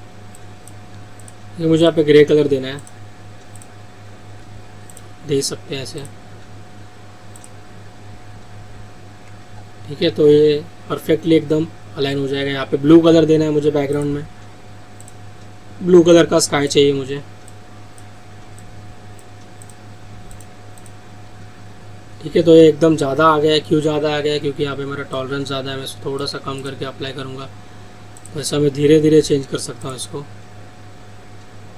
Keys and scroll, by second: 24.2 ctrl+z.